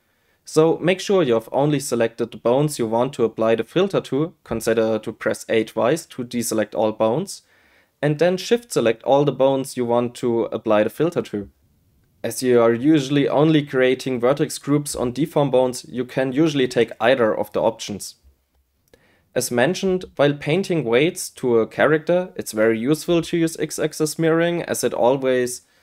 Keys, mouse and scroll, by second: 3.4-4.8 drag, 5.1-7.7 drag, 9.7 a, 10.0 a, 10.8 shift+click, 12.4 shift+click, 12.9 shift+click, 14.1 shift+click, 24.5 a, 24.7 a, 25.4 shift+click.